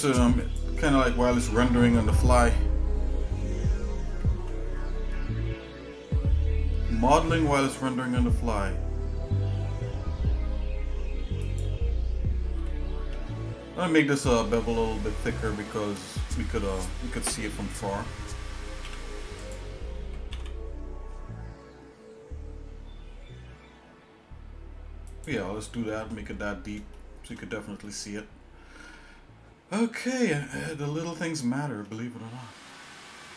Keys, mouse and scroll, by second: 1.0 shift+middle click, 4.2 ctrl+b, 12.7 g, 19.0 e, 20.3 alt+s, 25.6 shift+middle click, 26.3 Tab, 26.9 shift+middle click, 27.8 middle click, 29.0 scroll down 1, 30.1 middle click, 31.2 scroll up 1, 31.8 middle click, 32.7 middle click, 33.2 shift+middle click.